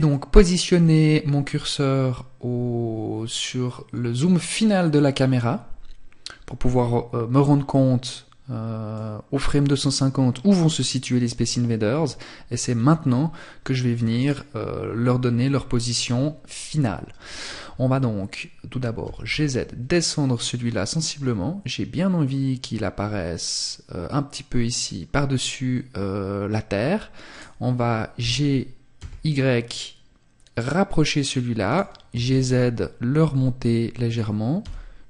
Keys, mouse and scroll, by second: 3.8 scroll down 1, 5.6-7.8 scroll down 1, 8.0 click, 13.2 right click, 23.9 click, 26.4 right click, 27.2 g, 30.8 click, 31.2 g, 33.2 click, 33.7 g.